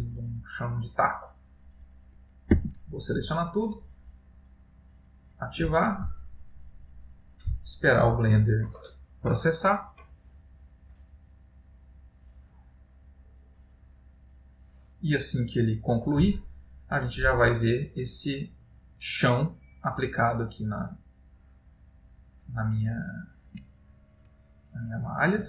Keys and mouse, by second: 24.0 ctrl+middle click.